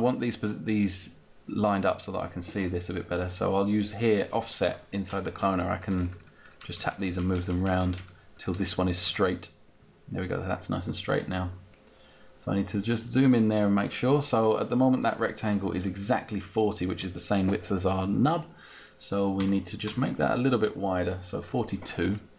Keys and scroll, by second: 5.5 Up, 5.8 Down.